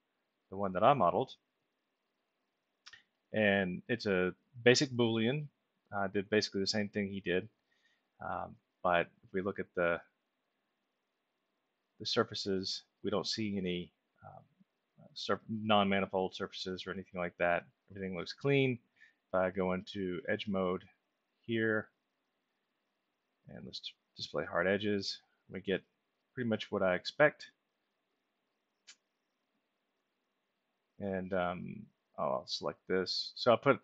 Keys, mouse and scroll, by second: 2.1 click, 5.3-6.3 alt+middle drag, 6.7 middle click, 7.6-8.6 ctrl+alt+middle drag, 9.0 middle click, 10.3-17.4 alt+middle drag, 20.7 click, 21.7 click, 24.1 click, 25.1-26.7 alt+middle drag, 27.0-30.0 ctrl+alt+middle drag, 30.5 middle click, 32.9 click.